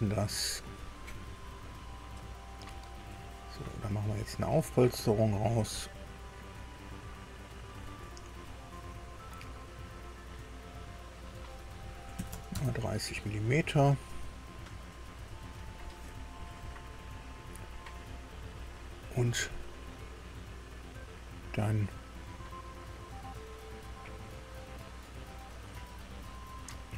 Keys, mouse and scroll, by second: 0.0 click, 2.9-4.3 middle drag, 5.5 click, 12.1 KP_3, 12.5 KP_Enter, 12.5 KP_0, 15.7 click, 17.6 scroll down 1.